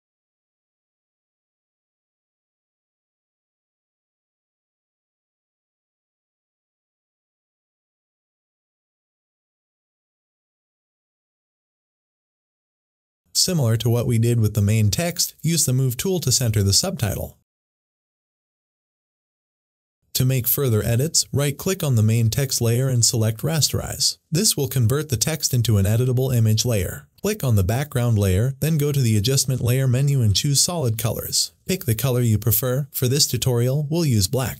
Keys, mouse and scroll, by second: 1.1-4.2 typing, 5.5 ctrl+a, 6.4 click, 6.8-7.6 typing, 8.9-19.7 drag, 19.8 click, 22.2 right click, 23.8 click, 29.5 click.